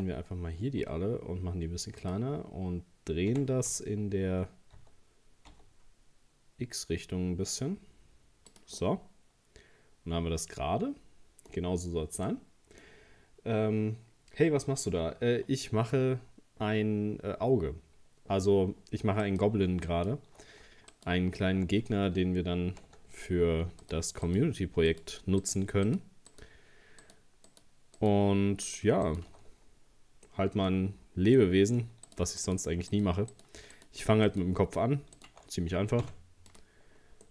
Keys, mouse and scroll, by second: 0.8 s, 3.3 r, 8.8-11.8 middle drag, 11.8-12.2 scroll down 2, 12.3-15.3 middle drag, 15.4 scroll up 2, 19.2 right click, 19.9 alt+shift+right click, 20.9 alt+shift+right click, 22.7 ctrl+z, 23.8 alt+shift+right click, 24.3 alt+shift+right click, 24.9 alt+shift+right click, 25.4 alt+shift+right click, 25.9 alt+shift+right click, 26.3 alt+shift+right click, 27.0 alt+shift+right click, 27.5 alt+shift+right click, 28.0 alt+shift+right click, 28.7 alt+shift+right click, 29.1 alt+shift+right click, 29.9 scroll down 2, 30.3 middle click, 30.7-31.1 scroll up 2, 31.4 middle click, 32.1 alt+shift+right click, 32.4 alt+shift+right click, 32.9 alt+shift+right click, 33.3 alt+shift+right click, 33.8 alt+shift+right click, 34.3 alt+shift+right click, 35.2 alt+shift+right click, 36.0 x, 36.8-37.3 scroll down 3.